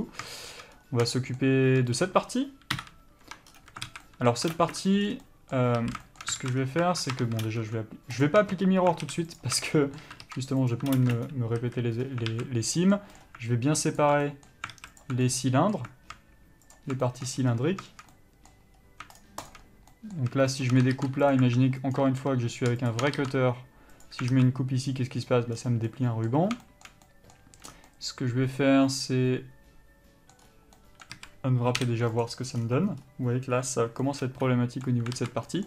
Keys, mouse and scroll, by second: 0.0 alt+a, 0.1 scroll up 1, 0.5 shift+middle click, 1.0 scroll up 1, 1.3 shift+middle click, 2.2 click, 3.0 KP_Divide, 3.5 Tab, 3.7-4.1 scroll up 1, 4.1 alt+a, 4.7 ctrl+space, 4.7-8.5 middle drag, 5.2 scroll down 1, 6.0 a, 6.6 alt+a, 6.8 scroll up 1, 7.4 Tab, 8.5 click, 8.6 Tab, 9.0 scroll up 1, 9.2 alt+a, 9.6 alt+click, 9.9-11.2 middle drag, 10.9 ctrl+e, 11.2 ctrl+space, 11.8 a, 12.2-12.5 scroll up 1, 12.5 alt+a, 13.0 middle click, 13.4-14.2 scroll up 1, 14.2 alt+click, 14.4 middle click, 14.9 alt+a, 15.2 alt+click, 15.5 middle click, 17.0 alt+shift+click, 17.2 shift+middle click, 17.6 scroll up 1, 18.3 middle click, 19.0 scroll up 1, 19.4 shift+click, 20.2 middle click, 20.8 shift+click, 21.5 ctrl+e, 22.3 ctrl+z, 23.1 shift+click, 24.2 ctrl+e, 24.5 alt+a, 25.7 scroll down 1, 26.1 middle click, 27.9 scroll down 1, 28.1 middle click, 30.6 scroll up 1, 31.0 middle click, 31.4 a, 32.5 u, 34.2 middle click, 35.4 alt+a.